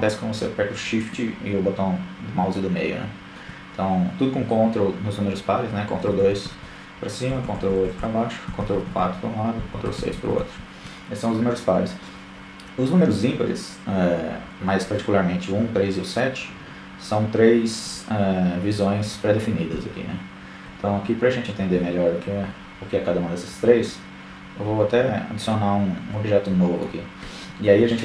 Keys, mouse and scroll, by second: 3.1-3.5 ctrl+KP_2, 4.4-4.9 ctrl+KP_8, 5.1 ctrl+KP_8, 5.6 ctrl+KP_4, 6.0 ctrl+KP_4, 6.2 ctrl+KP_4, 6.7-7.6 ctrl+KP_6, 15.1 KP_1, 15.8 KP_3, 16.9 KP_7, 17.8 KP_1, 19.7 KP_3, 22.2 middle click, 25.1-28.0 drag.